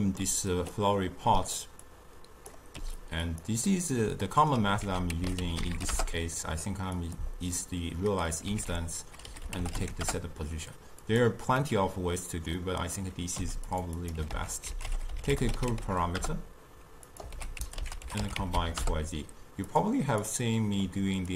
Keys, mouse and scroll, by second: 0.8 click, 1.9-2.8 drag, 2.8 g, 3.7-4.9 middle drag, 4.9 ctrl+a, 7.6-8.7 middle drag, 8.7 ctrl+a, 11.7-12.6 middle drag, 12.6 click, 13.4 g, 14.0 click, 14.4 ctrl+a, 17.4 ctrl+a, 20.3 click.